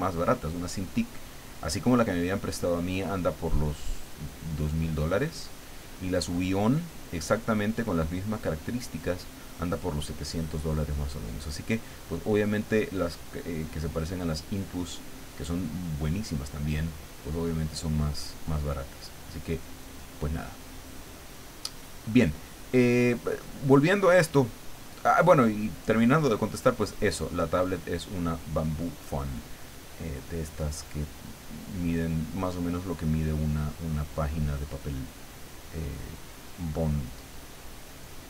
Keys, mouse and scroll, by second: 3.1-5.3 drag, 6.4-9.6 drag, 10.3-12.9 drag, 13.8-16.7 drag, 17.2-19.4 drag, 20.1-22.7 drag, 23.6-26.6 drag, 27.1-30.1 drag, 30.6-33.1 drag, 33.7-35.7 drag, 36.2-38.2 drag.